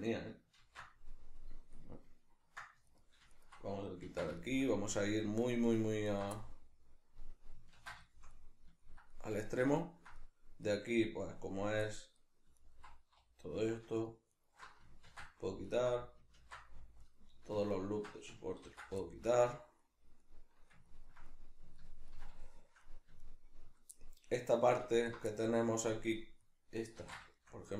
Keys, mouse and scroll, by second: 0.6 ctrl+x, 2.9 alt+right click, 3.3 alt+shift+right click, 4.1 ctrl+x, 4.4-6.1 shift+middle drag, 6.1 alt+right click, 6.3-12.6 middle drag, 7.7 ctrl+x, 12.6 alt+right click, 14.0 alt+shift+right click, 14.3 alt+shift+right click, 15.1 ctrl+x, 15.7 alt+right click, 16.3 ctrl+x, 17.0 alt+right click, 17.7 alt+shift+right click, 18.7 ctrl+x, 19.0-24.9 shift+middle drag, 24.9 alt+right click, 25.3-27.7 middle drag, 27.0 ctrl+x.